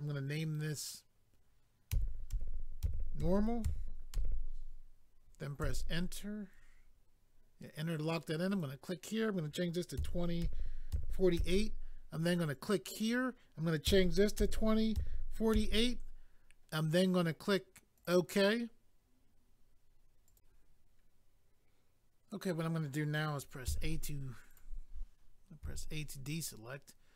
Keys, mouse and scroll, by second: 5.6 Return, 8.5 click, 8.6 click, 10.0 2, 12.2-13.9 typing, 12.5 click, 12.6 click, 12.9 click, 13.0 double click, 17.9 click, 18.1 click, 20.3 click, 20.4 click, 24.5 click, 25.6 a.